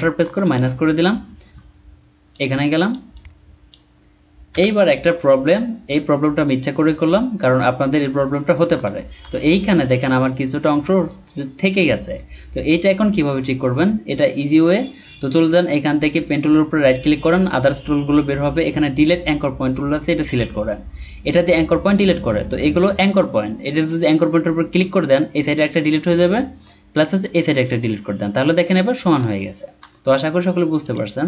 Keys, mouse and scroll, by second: 0.5 alt+click, 0.9-1.6 scroll down 1, 3.1 double click, 4.5 BackSpace, 6.8-8.6 scroll down 1, 8.8-9.4 alt+scroll up 1, 16.0 right click, 25.8-26.6 scroll down 1, 29.3-30.0 alt+scroll down 1.